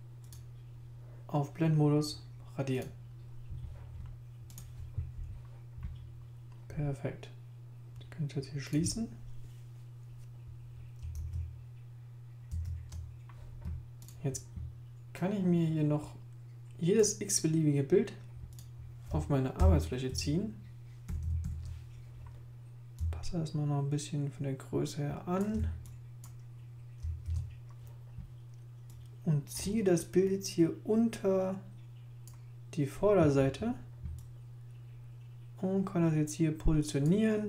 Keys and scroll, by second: 11.2 super+Tab, 12.5 super+Tab, 19.6 super+0, 20.1 super+1, 21.1 super+-, 27.2 super+i.